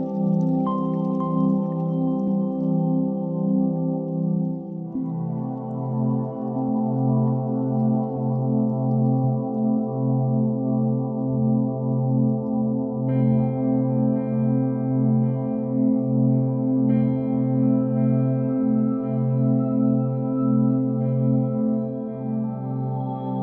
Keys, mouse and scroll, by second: 1.7 click, 2.6 shift+a, 3.9 g, 4.2 x, 5.6-7.8 drag, 6.6 0, 6.8 0, 8.2-9.8 drag, 10.5-11.9 drag, 12.8 g, 13.3 y, 14.4 click, 14.9 shift+d, 16.0 click, 16.6 g, 16.9 y, 17.7 click, 18.4 shift+d, 19.2 click, 20.5 shift+d, 22.2 shift+middle click, 22.8 g.